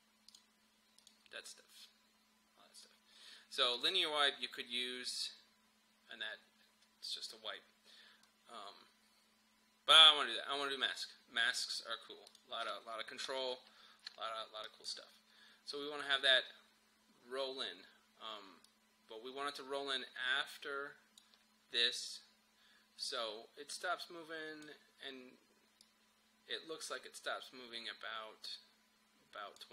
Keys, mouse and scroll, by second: 1.5-3.0 scroll up 1, 3.8 click, 4.4-5.2 scroll down 1, 11.0 click, 13.3 m, 14.6 click, 18.7-29.7 drag.